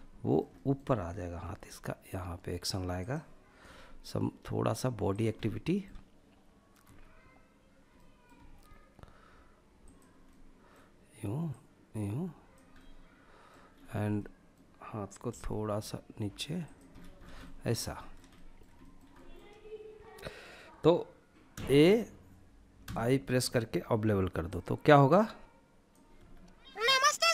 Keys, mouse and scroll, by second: 0.7 g, 2.2 click, 2.9 r, 4.3 click, 4.6-5.1 middle drag, 6.1 e, 7.2 middle click, 7.6 r, 9.1 click, 9.5-9.9 middle drag, 10.8 click, 12.0-12.7 middle drag, 12.9-13.7 scroll up 3, 13.4 middle click, 14.5 g, 15.9 click, 16.1-16.6 scroll down 3, 16.6 middle drag, 17.2 shift+middle click, 17.6 middle click, 18.0 shift+middle click, 18.4 shift+middle click, 20.8 a, 22.0 i, 23.8-25.2 drag, 25.4 space, 26.9 click.